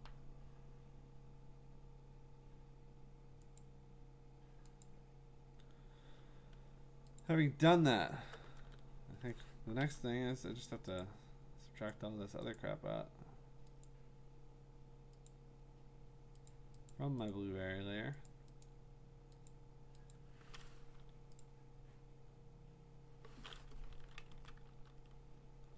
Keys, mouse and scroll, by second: 3.6 click, 4.8 click, 7.2 ctrl+click, 8.6 ctrl+d, 11.0 click, 11.9 click, 12.6 click, 13.8 click, 15.3 click, 16.5 click, 16.9 click, 17.3 click, 18.3 click, 18.6 click, 19.5 click, 20.1 click, 21.4 click, 22.0 Delete, 24.3 ctrl+z, 24.7 ctrl+BackSpace.